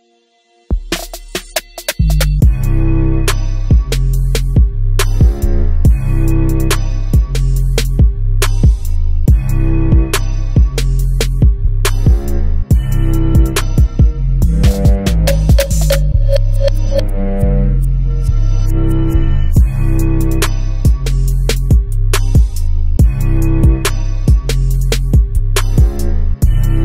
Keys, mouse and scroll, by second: 4.0 click, 5.1 Tab, 6.5 click, 7.1 z, 8.8 click, 9.0 g, 13.0 click, 13.8-21.4 drag, 23.7-26.8 drag.